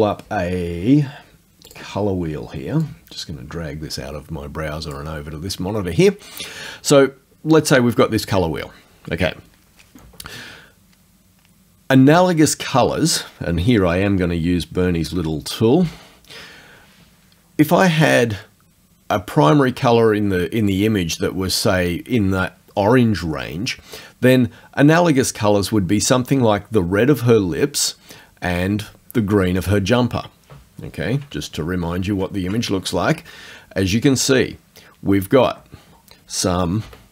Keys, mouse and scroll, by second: 1.7 click, 2.9-5.2 drag, 15.8 F9, 21.0 click, 26.8 click, 28.9 click, 31.4 alt+Tab, 36.9 F9.